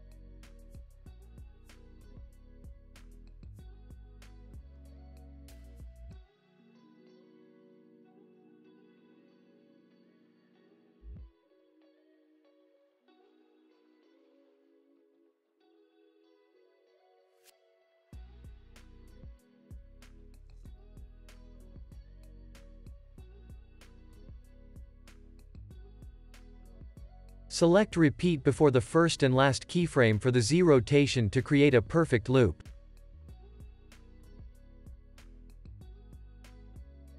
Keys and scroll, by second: 0.4 x, 4.0 super+c, 4.3 z, 4.9 z, 5.6 z, 6.0 super+v, 6.7 super+s, 12.8 super+s, 19.7 space, 22.7 space, 23.1 super+s, 24.2 z, 24.8 x, 25.2 z, 26.2 super+s.